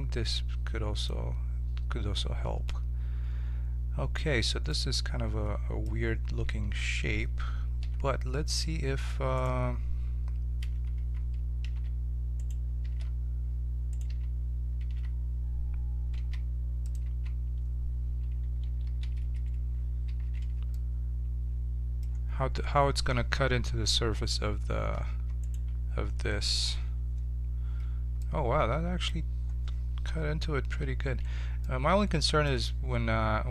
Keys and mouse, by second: 4.7-5.7 middle drag, 6.4 a, 6.7 a, 7.8 e, 10.9 z, 11.7 g, 12.8 g, 14.1 z, 14.8 g, 17.0 z, 18.6 a, 18.8 a, 20.0 ctrl+n, 24.3 Tab, 25.4-26.6 drag, 26.6 ctrl+KP_Subtract, 28.2-30.0 drag, 30.1 KP_7, 31.0-33.4 middle drag, 31.2 z.